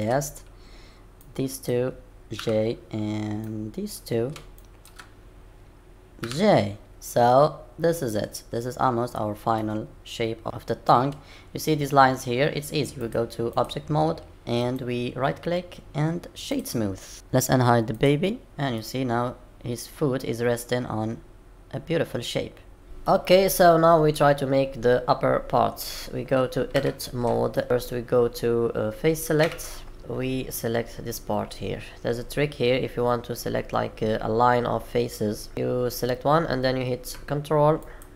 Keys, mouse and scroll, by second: 1.2 click, 2.4 j, 3.4 click, 4.6 shift+click, 6.2 j, 6.9 middle click, 8.8-9.5 scroll down 1, 9.5 middle click, 9.5-9.8 scroll down 2, 13.0 click, 14.6 right click, 17.9 click, 18.7 middle click.